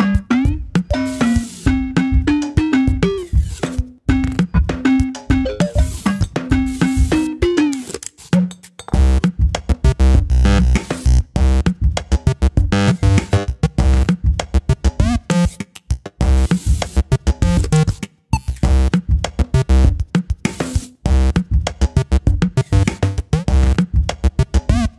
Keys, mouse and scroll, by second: 0.1 Tab, 2.0 shift+z, 3.1 click, 4.5 shift+z, 5.0-6.1 middle drag, 6.1 s, 8.5-10.2 middle drag, 10.2 shift+z, 10.5 click, 11.1 shift+z, 11.7 s, 12.5-13.6 middle drag, 13.6 Tab, 13.9-14.4 middle drag, 14.4-15.1 scroll up 2, 15.1-16.5 shift+middle drag, 16.5 Tab, 16.8-17.2 scroll up 1, 17.2 2, 18.4 ctrl+r, 21.0 middle click, 21.7 3, 23.5 alt+click, 24.7 alt+click.